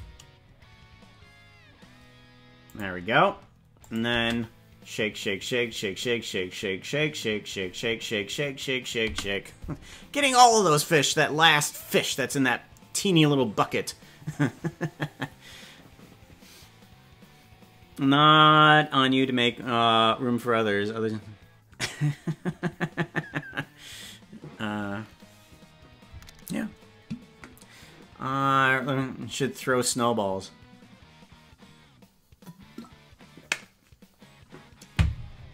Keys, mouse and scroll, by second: 3.8 click, 4.1 space, 9.1 space.